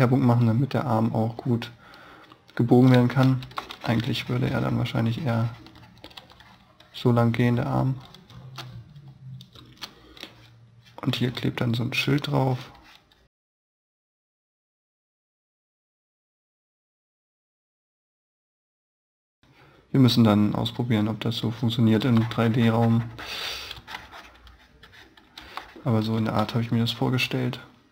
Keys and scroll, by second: 2.7 space, 3.3 e, 6.0 b, 8.2 space, 14.8 e, 16.5 b, 22.0 e, 22.6 e, 23.8 b, 24.3 b, 25.2 e, 26.0 b.